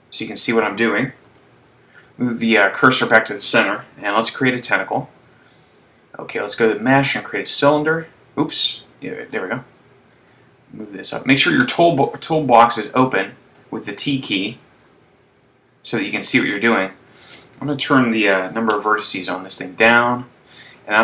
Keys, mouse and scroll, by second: 0.4 n, 1.5 shift+c, 4.4 shift+a, 10.4 click, 13.7 click, 15.3 t, 17.3 click.